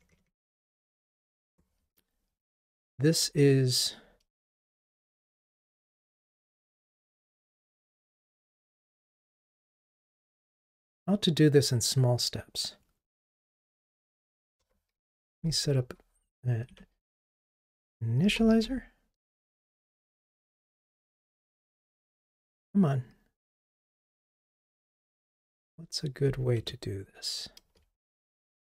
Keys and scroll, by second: 15.4 ctrl+i, 16.8 Escape, 19.4 Return, 21.3 super+j, 22.4 Escape.